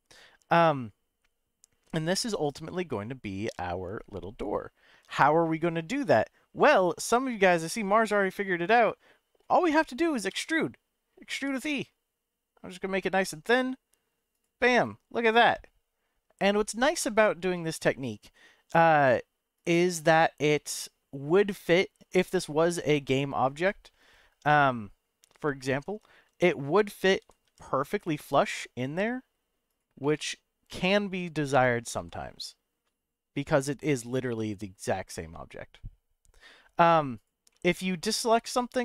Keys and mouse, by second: 10.3 e, 11.3 y, 14.3 click, 14.9-16.8 middle drag, 17.7-19.2 middle drag, 19.5 click, 20.4-22.2 middle drag, 25.1 l, 27.2 g, 27.4 y, 29.7 click, 30.2-31.8 middle drag, 31.9 g, 34.3 y, 37.1 click, 37.6-38.8 middle drag.